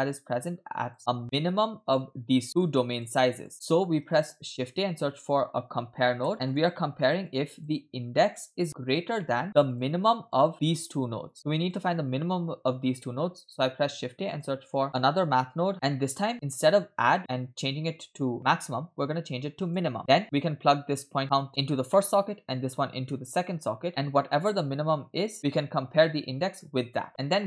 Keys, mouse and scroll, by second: 0.0-0.7 scroll up 2, 0.8 click, 2.5 middle click, 3.0 click, 3.5 click, 3.5 middle click, 3.5-3.9 scroll down 2, 4.6 shift+a, 7.3 click, 8.4-9.1 drag, 9.2 middle click, 9.4 scroll up 2, 9.7 click, 10.5 middle click, 10.5 scroll down 2, 11.3 click, 11.7 click, 13.0 middle click, 13.6 shift+a, 15.7 right click, 16.3-16.9 scroll down 1, 16.9 scroll down 1, 17.0-19.8 drag, 20.0 middle click, 20.1 scroll down 3, 21.2-21.7 drag, 21.9 middle click, 23.5-24.0 drag, 24.2 middle click, 25.3 click, 27.0 middle click.